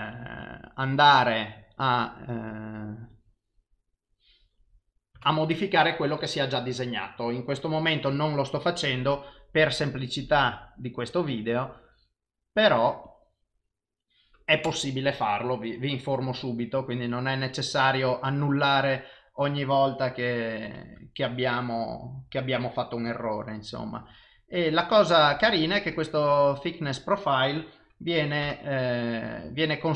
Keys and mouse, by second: 8.6 click, 9.7 click, 18.7 click, 23.1 click, 24.1 click, 29.6 click.